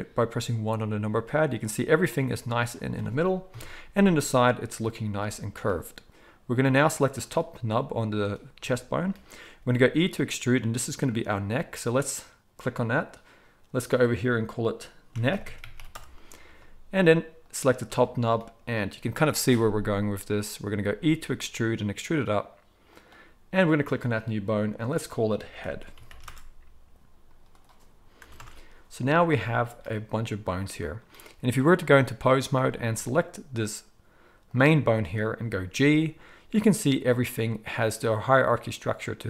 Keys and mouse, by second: 2.1-11.2 drag, 3.5 KP_3, 9.5 e, 11.2 middle click, 11.9 click, 12.6-13.9 middle drag, 13.9-17.5 drag, 17.5-23.5 middle drag, 20.8 e, 23.5 click, 23.6-24.8 middle drag, 24.8-34.5 drag, 34.5-39.2 middle drag, 35.7 g.